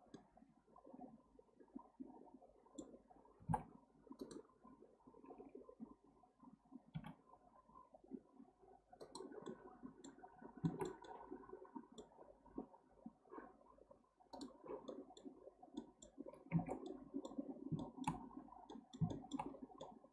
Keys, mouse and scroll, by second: 0.1-3.1 middle drag, 9.5-10.3 middle drag, 10.3-10.7 scroll down 2, 10.7-14.1 shift+middle drag, 14.5 click, 14.9-16.2 middle drag, 16.2-16.5 scroll down 1, 16.5 alt+z, 16.9 middle click, 17.5 scroll down 2, 17.8-19.5 shift+middle drag, 19.5-19.8 scroll up 1, 19.8 middle click.